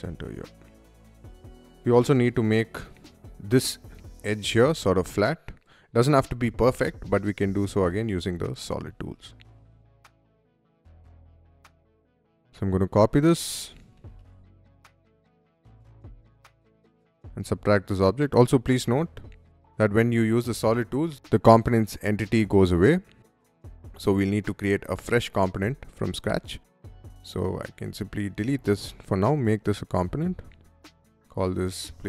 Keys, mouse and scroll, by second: 0.2 middle click, 0.8 space, 0.8 click, 0.9 middle click, 2.1 middle click, 2.9 middle click, 4.9 middle click, 5.3-6.7 middle drag, 7.2 middle click, 7.8 r, 8.4 click, 9.3 Escape, 9.9 click, 10.1 Up, 10.2 middle click, 10.3 click, 10.4-12.0 typing, 10.5 click, 11.0 shift+middle click, 12.1 middle click, 12.2 ctrl+c, 13.4-15.2 typing, 15.2 click, 15.9 click, 16.6 space, 17.1 click, 19.3 Escape, 19.3 click, 19.8 click, 20.4 click, 21.0-25.9 middle drag, 27.0 click, 28.0 Delete, 28.8 click, 29.8 click, 31.4-32.0 typing.